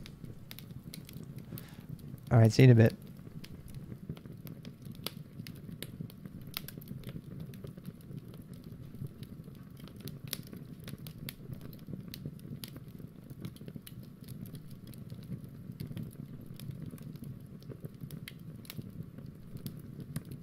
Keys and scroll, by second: 0.0-0.9 typing, 4.2-5.0 typing, 5.3 ctrl+alt+r, 8.8 BackSpace, 11.4 super+Tab, 16.9 super+Tab, 17.3 super+Tab.